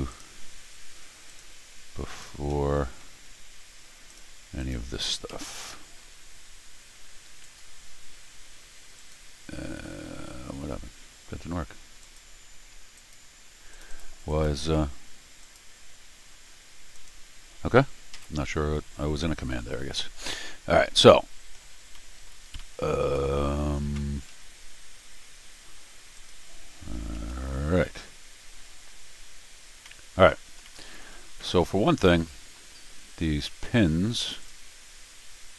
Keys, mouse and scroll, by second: 0.1 click, 1.3 click, 2.2-3.9 scroll down 3, 4.1 click, 4.6 click, 5.3 ctrl+alt+r, 7.4 click, 9.0 click, 12.0 click, 13.0 click, 13.7 click, 13.9 click, 14.3 click, 14.7 Escape, 15.4 click, 16.9 click, 18.1 ctrl+alt+r, 21.1 middle click, 21.8 scroll down 1, 21.9 middle click, 22.6 middle click, 26.1 click, 27.1 ctrl+alt+r, 29.6 scroll up 2, 29.8 middle click, 30.6 middle click, 31.3 scroll down 2, 31.4 middle click, 31.9 middle click, 32.6 middle click, 33.4 Tab, 34.4-35.5 drag, 35.2 middle click.